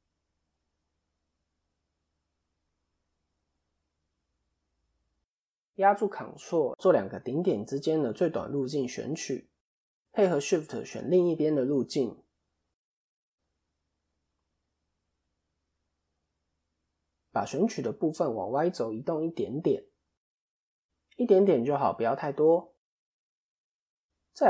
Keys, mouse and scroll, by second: 1.2 middle click, 1.9 click, 2.1 middle click, 2.8 shift+middle click, 3.8 middle click, 3.8-4.2 scroll up 1, 4.8 click, 6.8 ctrl+click, 9.3 middle click, 10.4 shift+click, 12.8 ctrl+shift+click, 13.5 middle click, 14.4-14.9 scroll down 1, 14.9 KP_7, 15.8-16.1 scroll down 1, 16.6-17.1 scroll down 2, 17.4 click, 21.8 click, 22.3 middle click, 23.2-23.8 scroll up 3, 23.5 middle click.